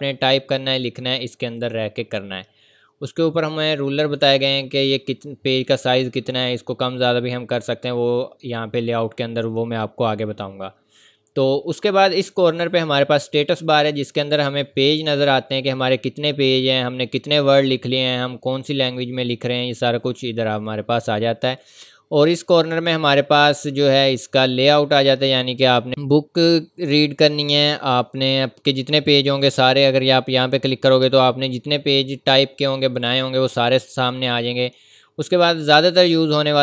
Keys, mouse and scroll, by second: 1.6 scroll up 1.